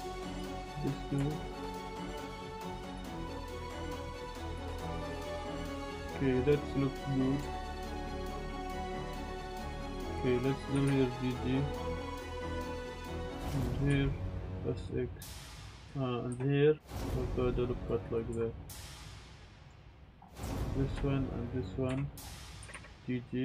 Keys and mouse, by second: 0.2 click, 0.3 click, 0.6 alt+shift+click, 1.2 shift+middle click, 2.3 click, 4.9 Tab, 5.0-5.8 drag, 5.9-6.6 drag, 7.5 shift+middle drag, 7.7 click, 7.7-10.9 typing, 8.2 click, 9.0 click, 9.9 Tab, 12.6 click, 13.3-14.4 typing, 13.3 click, 13.5 click, 16.3 ctrl+r, 17.9 click, 18.3 Tab, 18.8 Tab, 18.8-19.7 middle drag, 20.6 shift+click, 20.6 z, 21.5 shift+click, 21.9 z, 22.6 g, 22.7 g.